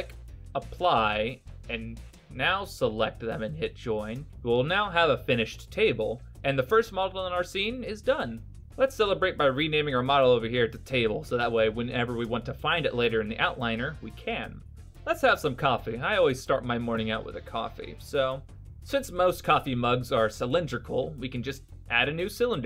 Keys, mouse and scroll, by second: 1.1 shift+right click, 3.8 ctrl+j, 8.3 click, 8.4 click, 14.8 shift+s, 14.9 middle click, 15.6 scroll up 3, 15.9 middle click, 16.9 shift+a.